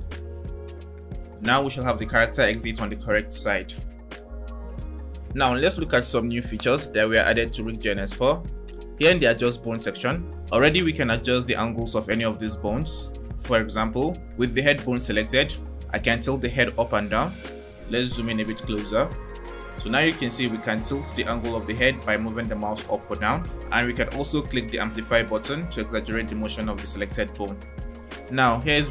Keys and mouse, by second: 5.2 space, 11.5-14.2 drag, 24.1 click.